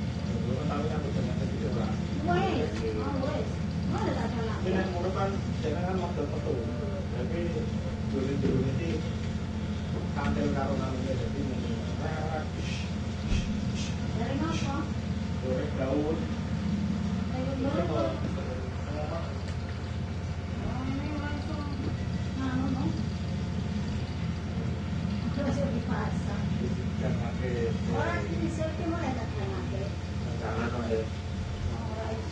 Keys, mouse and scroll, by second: 1.0 click, 2.3 6, 2.8 Return, 5.0 click, 7.0-8.0 drag, 8.8 shift+Left, 10.4 shift+Right, 12.0 click, 15.2 click, 17.3 click, 19.6 shift+s, 23.5 click, 25.1 click, 27.1 click, 28.0 shift+click, 30.1 click.